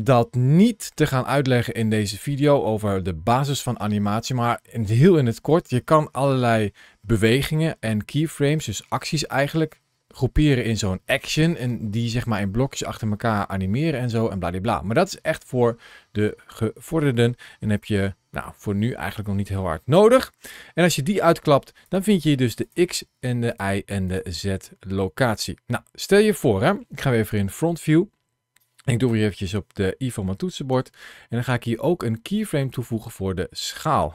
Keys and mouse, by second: 21.3 click, 22.4 click, 23.3 click, 23.9 click, 26.0 middle click, 27.1 KP_1, 30.5 i.